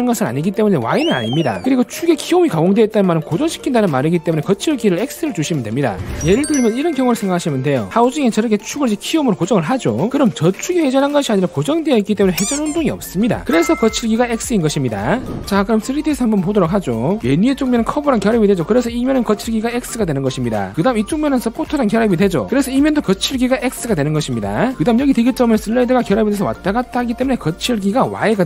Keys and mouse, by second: 17.6 right click, 18.3 v, 24.8 click, 26.4 click.